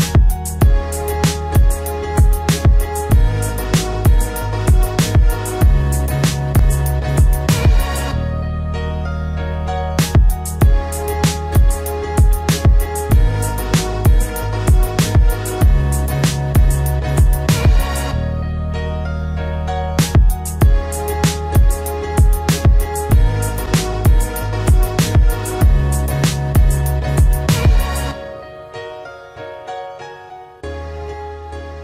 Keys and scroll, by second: 25.9 ctrl+t.